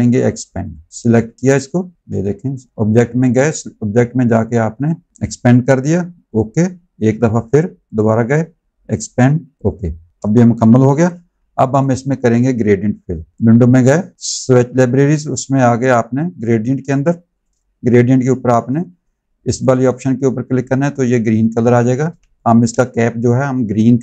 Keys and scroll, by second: 1.9 ctrl+z, 10.1 space, 10.8 v, 22.0 space.